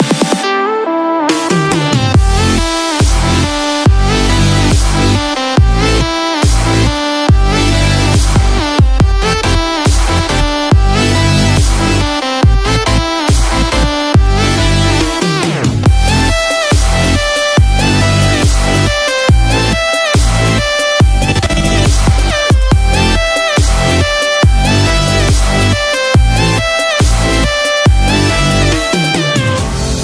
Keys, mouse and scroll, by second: 1.7 click, 12.3 scroll up 1.